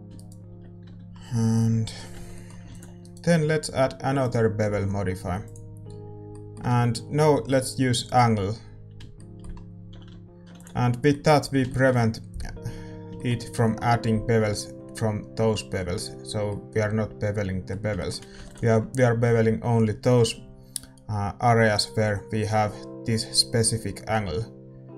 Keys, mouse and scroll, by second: 0.8 right click, 0.8 a, 1.1-5.9 middle drag, 1.5 click, 2.1 Tab, 3.0 ctrl+s, 3.0-5.9 right drag, 5.9 click, 6.2-8.9 middle drag, 8.9 click, 9.1-24.9 middle drag, 9.8 a, 10.0 a, 10.7 ctrl+s, 18.7 ctrl+s.